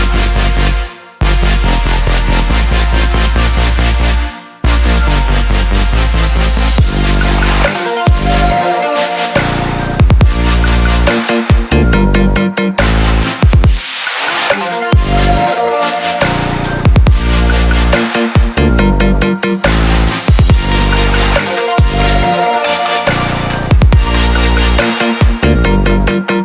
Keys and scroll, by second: 8.4 ctrl+j, 9.3 ctrl+j, 12.9 ctrl+j.